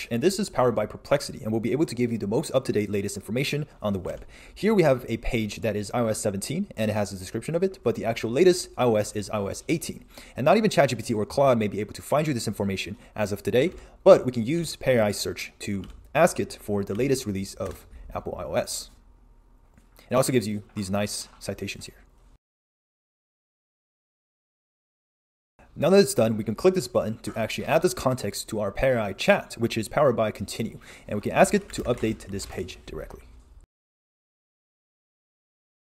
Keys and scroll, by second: 4.2 super+Tab, 13.7 super+e, 14.6 super+Tab.